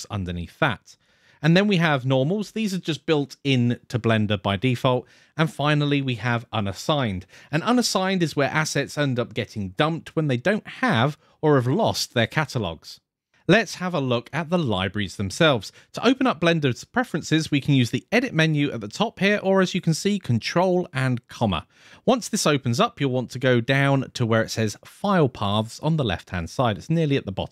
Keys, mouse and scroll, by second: 0.0-0.8 scroll up 1, 0.8 click, 1.7 click, 5.7 click, 18.2-21.4 drag.